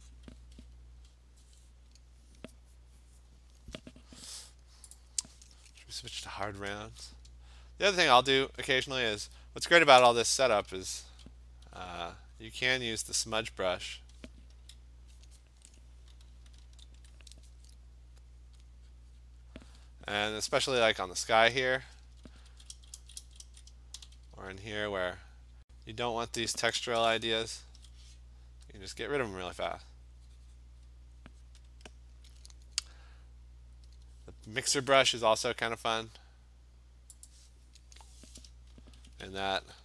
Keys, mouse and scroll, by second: 0.2 click, 1.9-4.3 scroll, 5.0 click, 5.2 middle click, 6.9 click, 6.9 scroll, 8.3 click, 10.6-11.3 ], 11.7 ], 11.9 ], 12.3 click, 12.5 click, 13.1 click, 14.6 [, 16.7 ctrl+e, 18.4 click, 18.5 click, 18.7 click, 19.2 click, 19.5 click, 20.3 click, 22.1-24.4 typing, 25.0 click, 25.2 click, 25.5 click, 25.6 click, 25.9 click, 26.3 click, 27.7 ], 28.8 click, 29.9 click, 30.9 click, 31.4 click, 31.7 click, 33.9 click, 37.3 click, 39.4-39.8 typing.